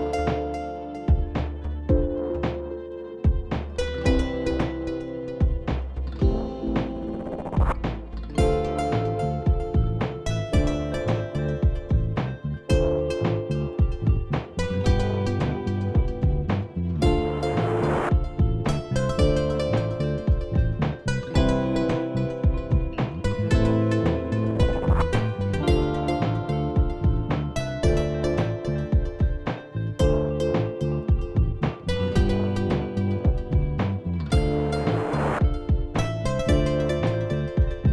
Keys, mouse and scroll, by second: 3.2 click, 5.3 click, 8.0 click, 12.3 click, 14.0 click, 18.3 click, 21.5 click, 23.7 click, 25.0 click, 26.8 alt+click, 30.3 click, 30.7 click, 31.9 click, 32.0 click, 36.7 alt+scroll, 37.8-37.9 alt+scroll.